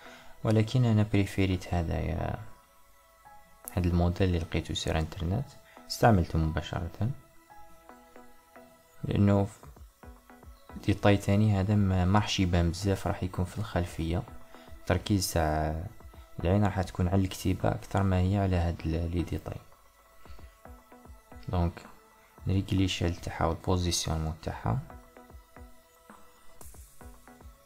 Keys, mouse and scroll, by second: 2.6-5.1 middle drag, 5.1 KP_1, 6.5 Tab, 9.1 click, 9.5 click, 10.0 click, 10.3 click, 10.8 click, 11.2 click, 13.6 click, 14.5 click, 21.6-24.6 middle drag, 24.8-27.6 middle drag.